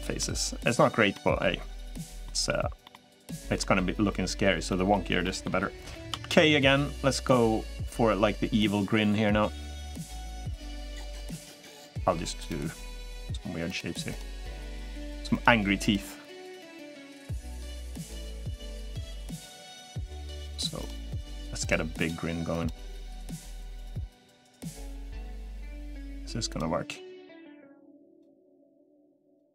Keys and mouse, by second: 0.9 middle click, 2.0 middle click, 2.6 middle click, 3.4 middle click, 4.4 middle click, 5.0 middle click, 17.6-29.5 middle drag.